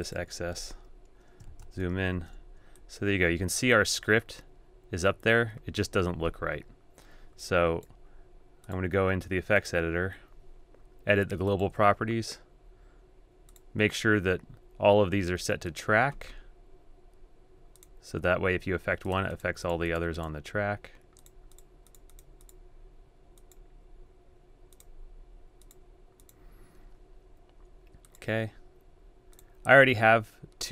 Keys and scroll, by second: 2.1 super+a.